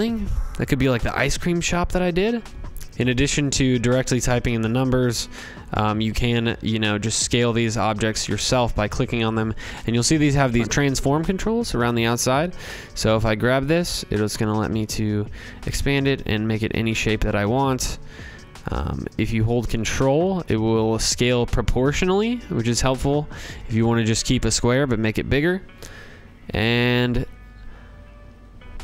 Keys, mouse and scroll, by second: 1.1 click, 1.6 click, 2.1-2.9 typing, 2.4 shift+click, 2.5 scroll, 3.1 scroll, 5.7 click, 6.0 click, 6.6 scroll, 7.5 click, 16.5-28.3 drag.